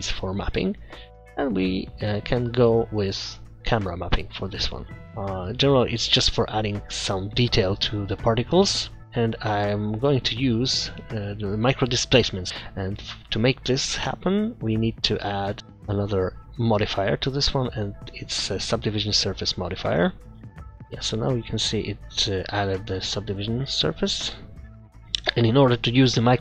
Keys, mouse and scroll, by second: 0.2 middle click, 0.8 click, 4.6 click, 5.0 scroll up 10, 5.0 KP_0, 6.0-6.4 scroll down 3, 8.0-8.4 scroll down 3, 8.5-9.1 scroll up 5, 9.1 middle click, 9.6 scroll down 2, 10.0 middle click, 10.2-11.6 scroll up 12, 12.3 scroll down 4, 12.5 middle click, 14.4 click, 15.7 click, 16.8 click, 20.9 scroll up 1, 25.0 click, 25.0-25.5 scroll down 3.